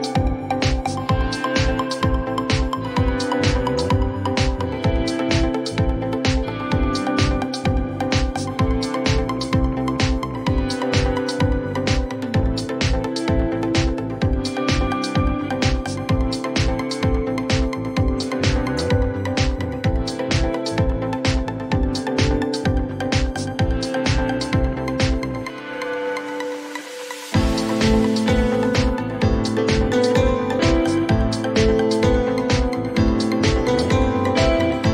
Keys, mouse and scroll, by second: 1.5-2.1 scroll down 4, 1.5 typing, 2.2-2.6 scroll, 3.5 click, 6.6 click, 9.0 click, 10.2 click, 15.3 click, 15.8 2, 15.9 Return, 18.1 click, 18.6 2, 18.7 Return, 21.4 click, 21.8 0, 22.2 Return, 24.4 scroll down 4, 24.6-25.5 scroll, 26.2 click, 26.6 click, 27.7 click, 29.1 click, 31.7 click, 32.1-33.0 typing, 33.4 Return.